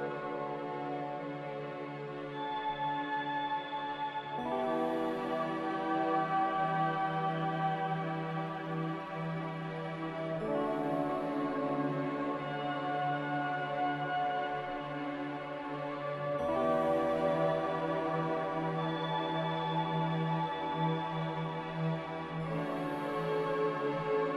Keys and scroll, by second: 3.4 z, 4.2 Delete, 7.2 Delete, 13.9 b, 18.0 m, 21.6 a.